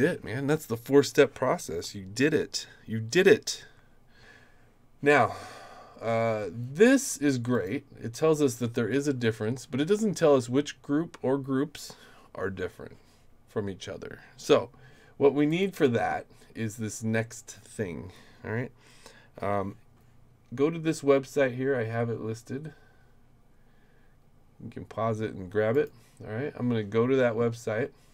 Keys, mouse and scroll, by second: 7.5 click, 15.5 click, 25.7 click.